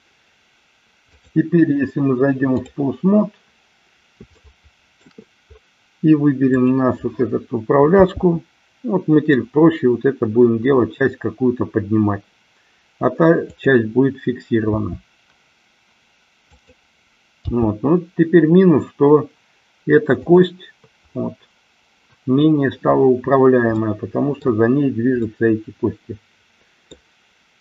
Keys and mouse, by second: 1.3-2.9 drag, 4.4 shift+middle click, 8.0 g, 13.6 click, 14.6 r, 17.5 g, 23.9-24.6 middle drag, 25.3-27.0 middle drag.